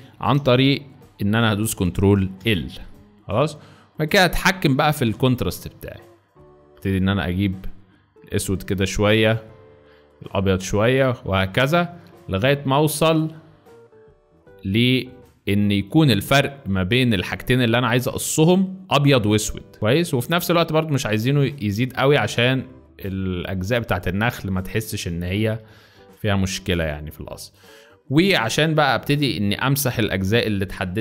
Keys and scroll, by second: 2.4 l, 25.6 z, 26.8 space, 28.9 space, 30.2 b.